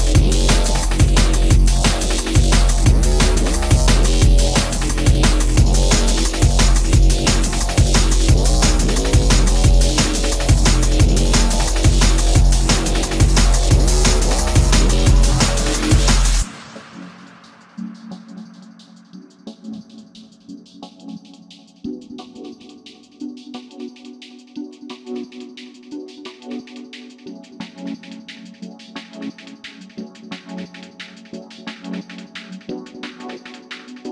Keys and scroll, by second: 0.8 alt+t, 2.2 space, 3.8 alt+x, 9.4 Escape, 15.1 space, 19.1 shift+x, 24.0 alt+t, 25.1 alt+x, 28.4 space, 31.1 Delete, 33.5 e.